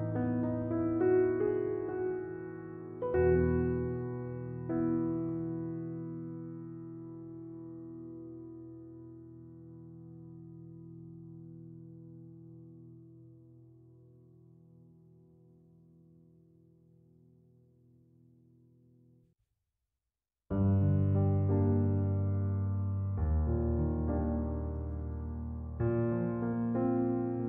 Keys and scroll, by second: 10.9 Escape, 17.5 Escape.